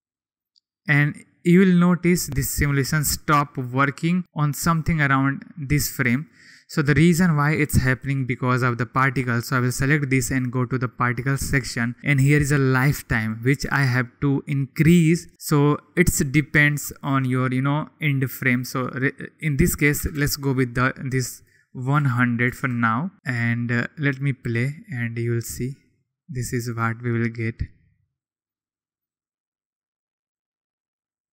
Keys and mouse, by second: 0.4-0.8 drag, 4.8-7.6 drag, 10.8 click, 13.2-22.8 drag, 20.1 0, 22.5 0, 23.1 0, 24.1 click, 28.5 click, 29.0 click.